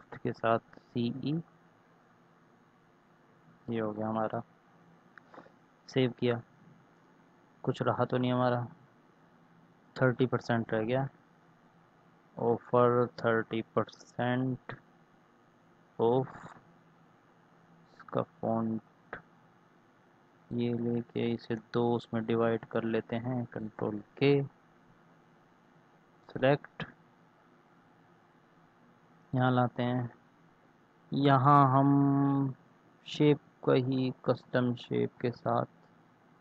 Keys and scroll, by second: 0.2 shift+c, 0.5 shift+e, 5.3 ctrl+s, 10.9 ctrl+c, 13.9 ctrl+v, 15.5 ctrl+a, 21.2 BackSpace, 21.4 Return, 22.1 ctrl+Return, 23.6 ctrl+k.